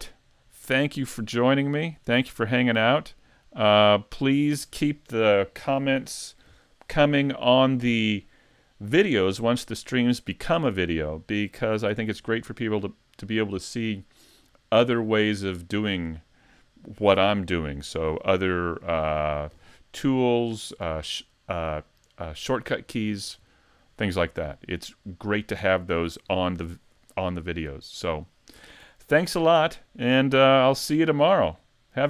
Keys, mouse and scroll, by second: 1.2 middle click, 1.8 middle click, 2.4 middle click.